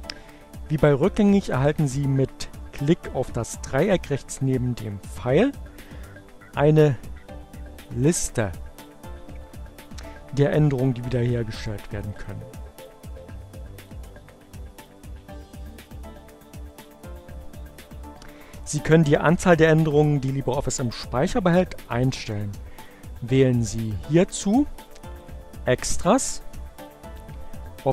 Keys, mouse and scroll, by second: 11.4 click, 14.0 click, 15.8 click, 22.2-23.5 drag, 24.5 click, 26.9 click.